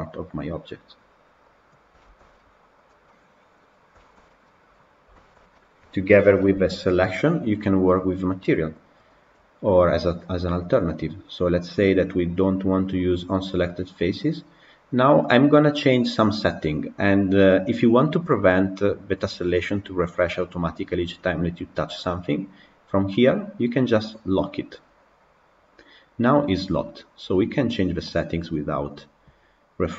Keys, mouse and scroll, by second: 1.4 click, 1.9 shift+middle click, 2.1-2.9 scroll down 1, 2.9-7.0 middle drag, 7.0 click, 25.2-26.6 drag, 28.9 click.